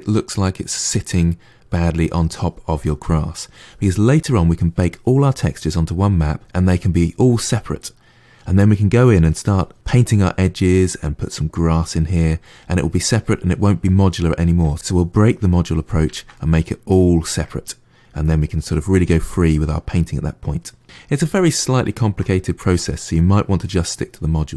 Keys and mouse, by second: 0.4-3.5 middle drag, 13.7-15.2 middle drag, 15.9-21.3 ctrl+middle drag, 21.7-24.5 shift+middle drag.